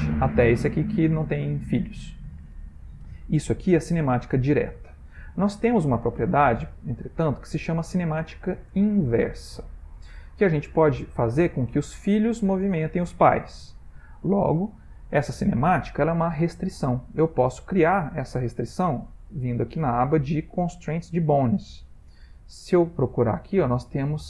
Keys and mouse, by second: 0.1 click, 0.3 r, 4.2 middle click, 6.6 shift+middle click, 7.5 middle click, 8.6 shift+middle click, 19.3 click, 21.8 click.